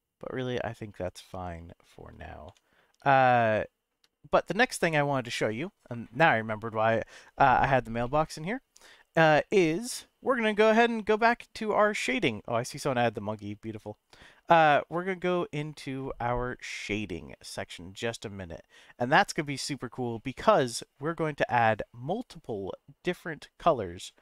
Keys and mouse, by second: 2.4 Tab, 3.3-3.9 shift+middle drag, 8.0-8.6 middle drag.